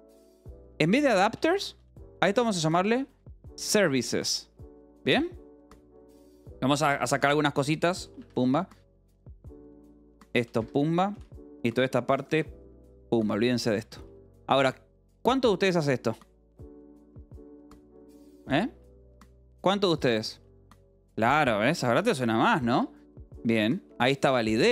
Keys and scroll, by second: 0.3-4.4 typing, 6.0 j, 8.0-11.3 typing, 8.1 Escape, 10.5 Escape, 12.9-17.0 typing, 18.4-19.6 typing, 20.8-24.7 typing.